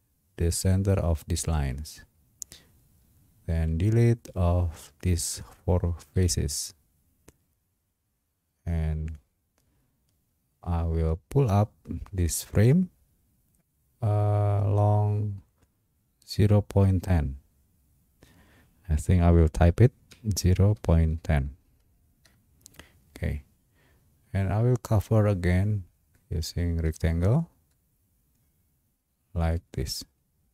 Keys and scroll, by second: 6.1 Delete, 20.1-21.9 typing, 22.2 Return.